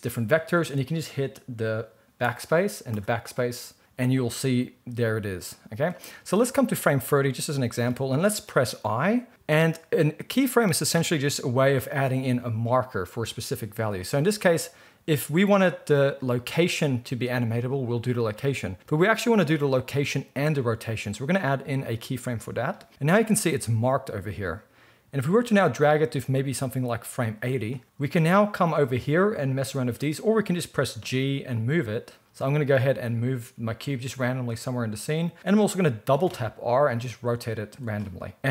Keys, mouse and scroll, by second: 2.2 BackSpace, 2.9 BackSpace, 31.1 g, 32.2-38.5 middle drag, 32.8 g, 36.1 r.